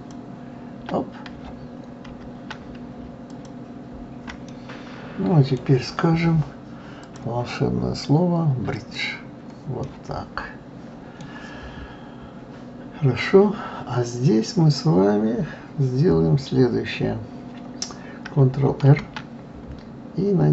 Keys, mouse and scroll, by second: 2.0 ctrl+z, 3.3 shift+click, 4.4-7.0 middle drag, 7.0-9.8 drag, 9.8-12.8 middle drag, 18.8 ctrl+r.